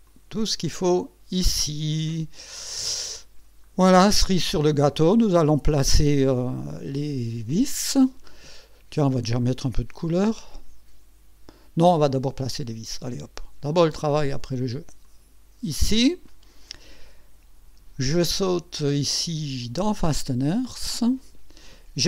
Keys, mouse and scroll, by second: 0.1 click, 0.8-3.0 drag, 3.4-3.7 scroll down 1, 4.0 right click, 15.0 click, 18.4 click, 19.8 click.